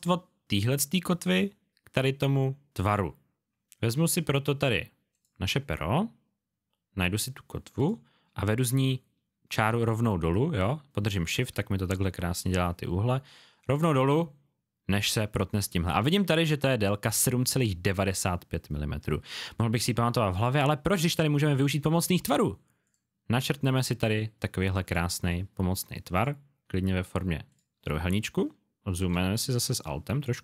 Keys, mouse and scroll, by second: 5.1 click, 29.1 space, 29.3 click.